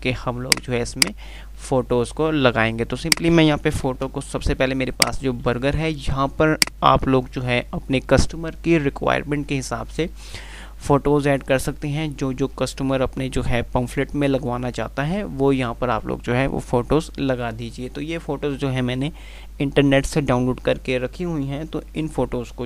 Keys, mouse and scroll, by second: 2.4 F2, 4.0 Page_Up, 5.2 click, 5.4 c, 6.6 click.